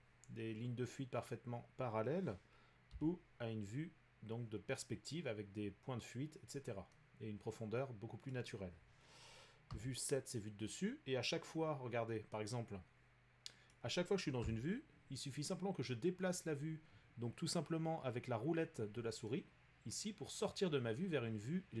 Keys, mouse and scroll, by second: 2.9 5, 8.3-13.1 middle drag, 9.7 7, 13.3 middle click, 14.4 7, 14.8-18.9 middle drag, 20.4-21.8 middle drag.